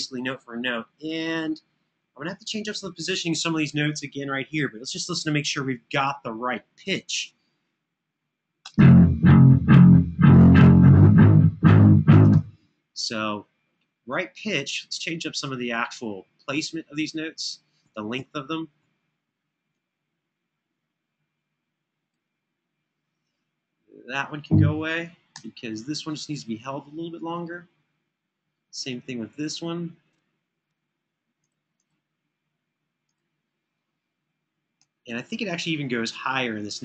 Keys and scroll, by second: 8.3 space, 14.0 space, 14.4 Home, 15.0 Home, 15.5 Home, 16.0 Home, 25.2 BackSpace, 34.3 Escape, 34.6 Escape, 34.8 Escape.